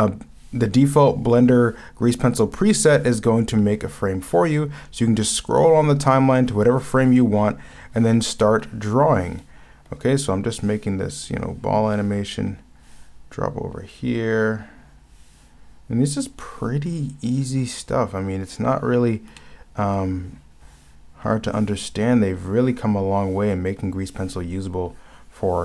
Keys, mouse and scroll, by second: 19.4 ctrl+z.